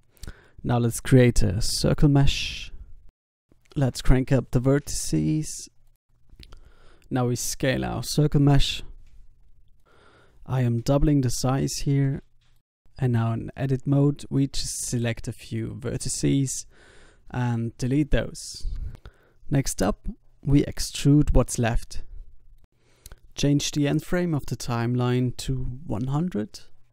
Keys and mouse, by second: 0.0 x, 0.5 shift+a, 4.8-7.1 middle drag, 5.5 Tab, 7.5 Tab, 7.9 s, 9.3 click, 10.5 s, 11.9 middle click, 12.6 Tab, 12.7-13.8 drag, 13.8 ctrl+z, 13.8 s, 14.3 b, 15.3 b, 16.0 b, 16.9 b, 18.1-20.9 typing, 22.8 Tab, 23.1 middle click, 24.2 middle click, 24.6-26.4 drag, 26.4 e.